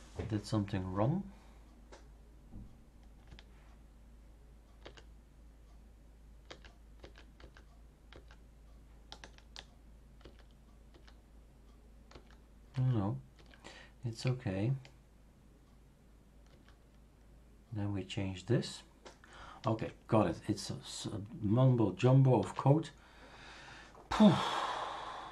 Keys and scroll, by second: 4.8 ctrl+z, 6.4 ctrl+z, 7.0 ctrl+z, 7.4 ctrl+z, 8.1 ctrl+z, 10.2 ctrl+y, 10.9 ctrl+y, 12.1 ctrl+y, 12.7 ctrl+y, 13.3 ctrl+y, 16.5 ctrl+y, 22.4 super+f.